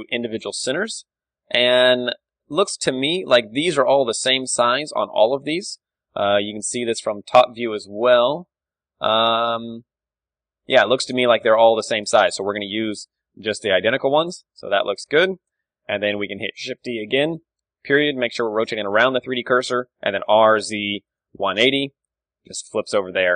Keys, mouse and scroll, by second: 0.1-4.8 middle drag, 5.6-11.3 middle drag, 7.0 KP_7, 11.8-14.1 middle drag, 11.8 KP_1, 13.7 g, 14.1-16.0 drag, 15.5 KP_1, 16.0 middle click, 16.7-17.9 middle drag, 16.7 shift+d, 17.3-19.2 right drag, 17.9 ., 18.3-20.1 middle drag, 20.2 r, 22.6 Tab.